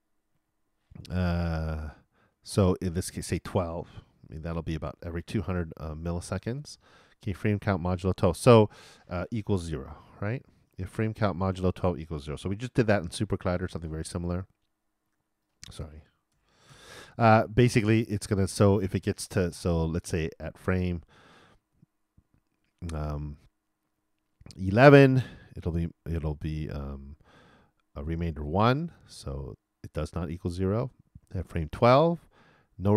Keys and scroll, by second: 12.6 shift+=, 12.8 shift+0.